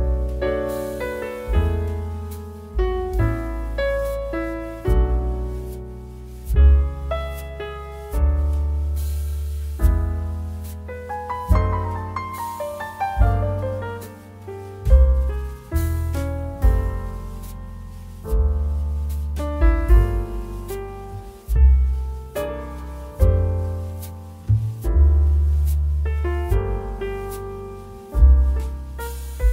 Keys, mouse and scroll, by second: 1.3 click, 1.8 s, 2.7 click, 4.2 g, 7.8 click, 10.4 alt+click, 11.2 g, 14.2 click, 15.5 alt+click, 16.7 s, 19.4 click, 21.7 alt+click, 23.3 ctrl+b, 25.9 click.